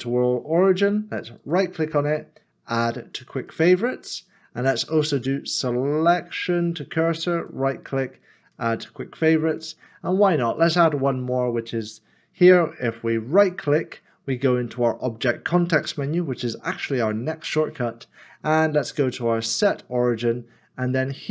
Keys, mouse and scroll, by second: 1.4 right click, 7.4 right click, 13.4 right click.